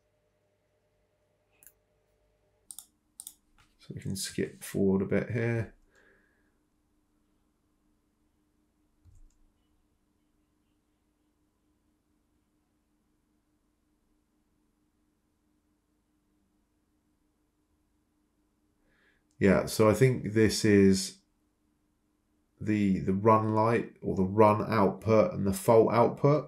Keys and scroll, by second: 0.8 Escape, 2.4 Up, 4.5 ctrl+c, 4.5 ctrl+v, 5.7-6.5 typing, 20.0 ctrl+c, 20.1 ctrl+v, 26.0 Escape, 26.2 Return.